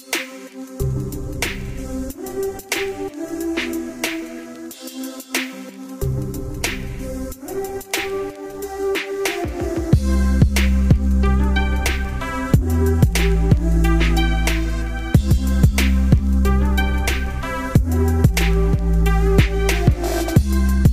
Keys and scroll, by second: 19.6 ctrl+space.